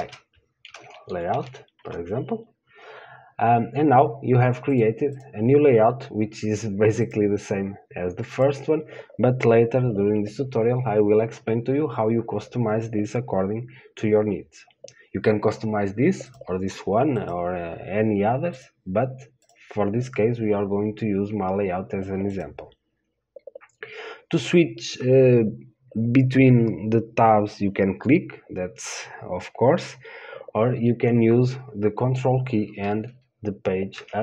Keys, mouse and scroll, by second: 16.6-34.2 drag.